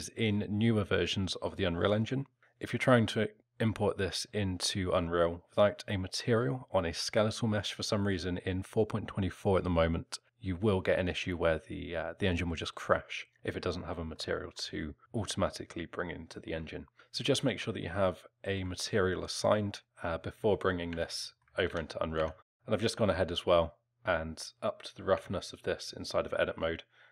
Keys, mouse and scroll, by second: 14.2 alt+middle click, 16.1 alt+middle click, 17.8 alt+middle click, 19.8 click, 20.5 alt+middle click, 20.9 Tab, 21.2 alt+middle click, 21.7 Tab, 22.2 Tab, 25.1 Tab.